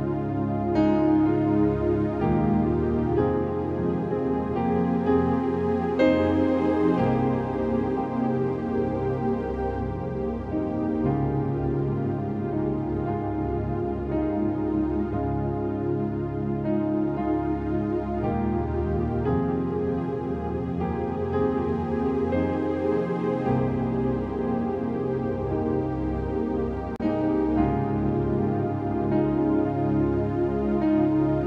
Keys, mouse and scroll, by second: 0.8 click, 2.7 click, 3.8 click, 5.2 Return, 5.4-6.1 typing, 6.0-6.4 scroll down 2, 7.3 Return, 7.4-8.3 scroll down 1, 8.4 click, 9.3 v, 9.8-11.3 drag, 11.9-12.5 typing, 13.5 click, 15.0 click, 15.6 scroll down 1, 15.9 space, 16.0 click, 16.1 space, 17.0-20.5 drag, 20.8-24.5 typing, 23.5-24.0 scroll up 4, 24.5 click, 31.1 click.